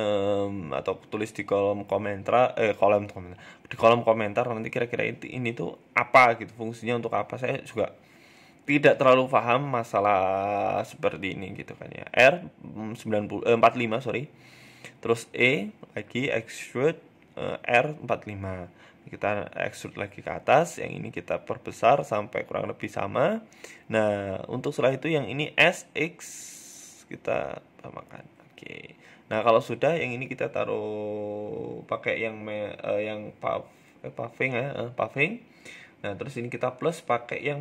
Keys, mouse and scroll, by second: 0.3 click, 0.6 s, 1.9 e, 2.9-4.1 scroll down 6, 3.2 shift+middle click, 3.7 shift+middle click, 5.7-7.0 scroll up 5, 6.0 ctrl+z, 6.6 shift+middle click, 7.0 s, 7.6 e, 8.8-9.3 scroll down 4, 9.0 shift+middle click, 10.4 e, 15.4 g, 16.4 r, 19.7-21.0 scroll up 3, 20.1 click, 21.0 s, 24.0 KP_1, 24.8 s, 27.5-28.1 scroll down 5, 27.7 middle click, 28.1 Tab, 28.3 middle click, 28.8 middle click, 28.8-29.7 scroll up 3, 29.7 click, 29.7 scroll up 1, 33.0 Tab, 33.7 middle click, 34.0 click, 35.5 click.